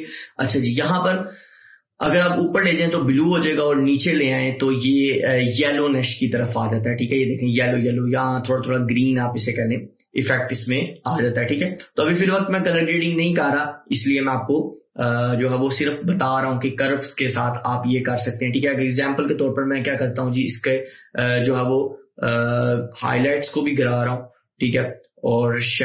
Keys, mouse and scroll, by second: 2.2-10.9 drag, 18.8 click, 18.8-25.8 drag.